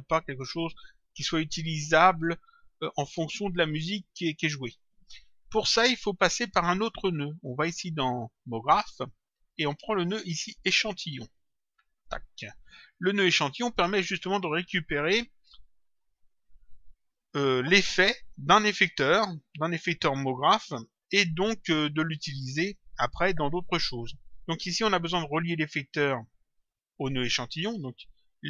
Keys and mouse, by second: 2.9 click, 8.5 click, 9.9 click, 11.3 click, 13.0 click, 20.9 click.